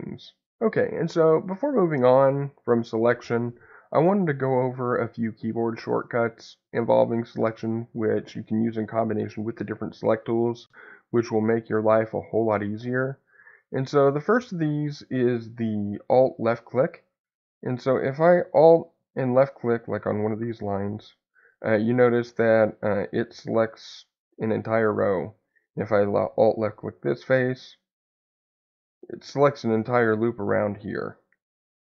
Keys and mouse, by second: 16.3 middle click, 28.0-29.2 middle drag, 31.0-31.8 middle drag.